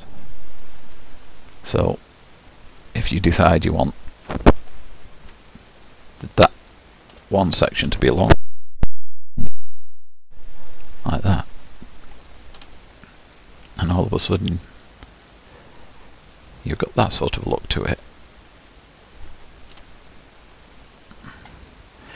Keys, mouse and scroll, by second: 0.0-2.5 middle drag, 2.5 click, 3.0-4.6 middle drag, 4.6 1, 5.6-6.7 middle drag, 6.7 click, 8.7 g, 12.6 Tab, 13.2-13.8 scroll down 4, 13.8-16.8 middle drag, 19.8 Tab, 20.4-21.6 scroll up 7, 20.6-22.1 middle drag.